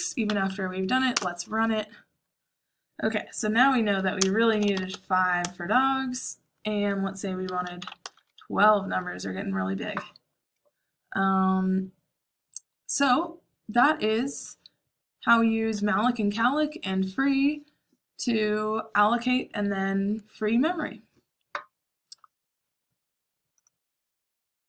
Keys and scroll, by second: 0.2 Page_Up, 1.1 Return, 3.9-5.3 typing, 5.3 Return, 7.5-8.2 typing, 10.1 typing.